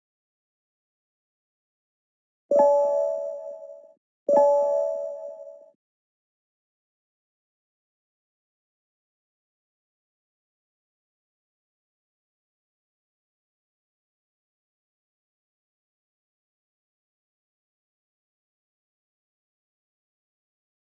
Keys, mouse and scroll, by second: 0.2 click, 0.6-1.8 scroll down 1, 2.2 click, 7.5 click, 10.3-11.1 scroll up 1, 11.3 click, 12.4 click, 14.9 click, 16.0 click, 16.9 click, 18.8 right click.